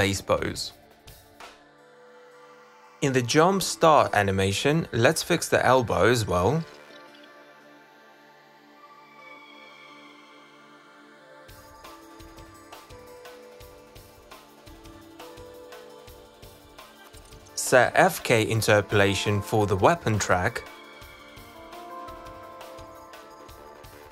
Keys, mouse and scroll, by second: 2.1 click, 10.4 click, 12.3 z, 12.8 click, 14.3 click, 15.6 click, 16.4 click, 17.9 click, 18.5 click, 19.2-21.2 drag, 22.9 click, 23.8 click.